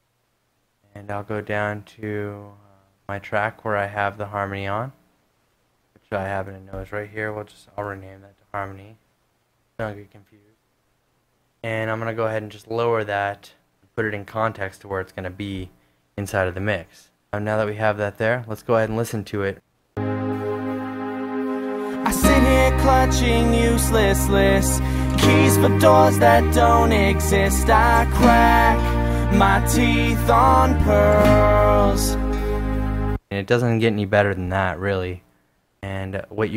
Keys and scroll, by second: 7.7-9.7 typing, 12.3-13.1 typing, 33.3 space, 36.0 super+Tab.